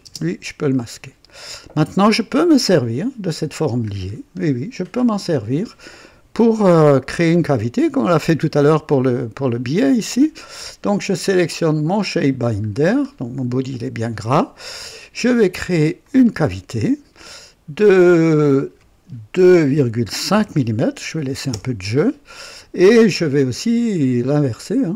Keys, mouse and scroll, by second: 0.0 space, 1.5-2.7 drag, 4.0 scroll up 1, 4.9 scroll down 1, 9.4-10.0 drag, 11.9 click, 12.6 scroll up 1, 16.0 click, 19.3-20.3 typing, 21.4 typing, 21.5 KP_Enter, 24.4 click.